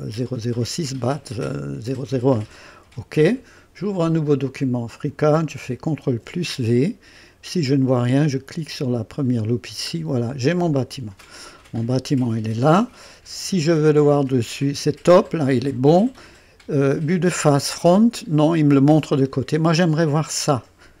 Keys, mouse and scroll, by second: 2.6 click, 4.2 click, 6.0 ctrl+v, 8.7 click, 9.9-10.3 scroll down 1, 10.7-12.2 drag, 14.1 KP_2, 17.1 KP_1, 18.9 click.